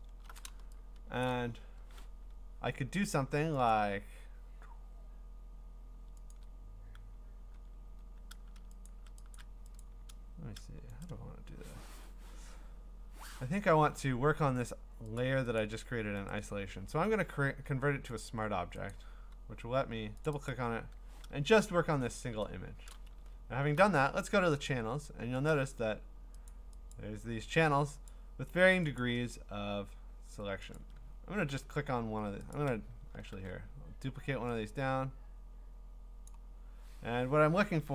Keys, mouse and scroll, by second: 1.1 scroll, 1.2 click, 3.7 click, 6.3 ctrl+click, 8.9 shift+click, 9.3 shift+click, 12.9 right click, 13.9 Escape, 14.7 click, 15.2 click, 15.6 click, 16.3 right click, 18.2 click, 18.9 click, 20.3 click, 20.5 click, 21.4 alt+scroll, 22.8-23.8 scroll, 22.9 click, 24.7 click, 25.5 click, 26.5 click, 26.9 click, 28.1 click, 29.0 click, 30.8 ctrl+click, 32.5 click, 33.3 ctrl+d, 36.3 click.